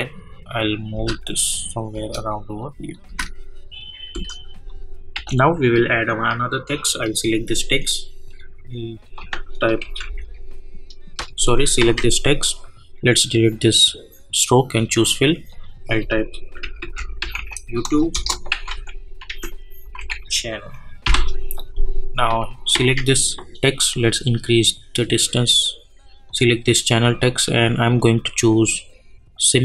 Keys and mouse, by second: 0.3 -, 0.9 space, 2.9 click, 3.8 space, 4.6 click, 5.1 k, 6.9 click, 9.6-10.5 typing, 11.8 ctrl+a, 13.2 click, 16.3-21.0 typing, 18.1 Return, 22.7 ctrl+a, 24.0-26.1 drag.